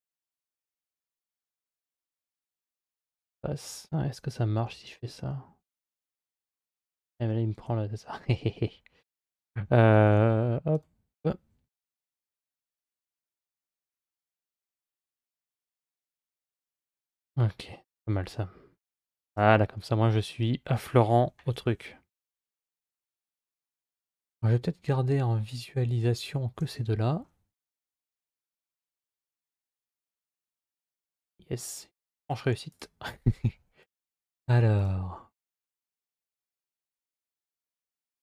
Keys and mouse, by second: 4.4 g, 9.9 alt+z, 12.9 2, 15.2 g, 19.6 middle click, 21.3 KP_7, 26.6 Tab, 27.5 KP_Divide, 29.2 KP_Divide, 32.0 click, 33.6 click, 37.0 KP_Divide, 38.0 KP_Divide.